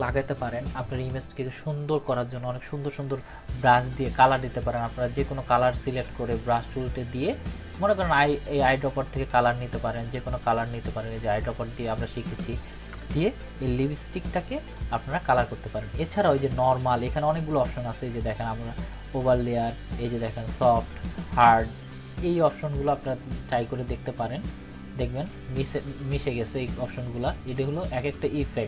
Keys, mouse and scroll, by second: 4.6 ctrl+-, 11.0 click, 12.9 ctrl+z, 14.6 click.